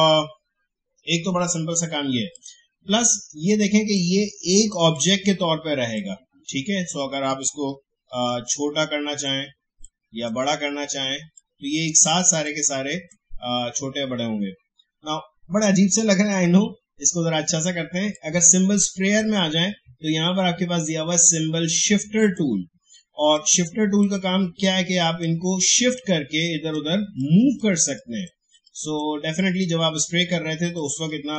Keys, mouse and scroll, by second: 2.3-6.8 drag, 8.4-11.3 shift+drag, 11.3-15.7 shift+drag, 18.4-31.3 drag.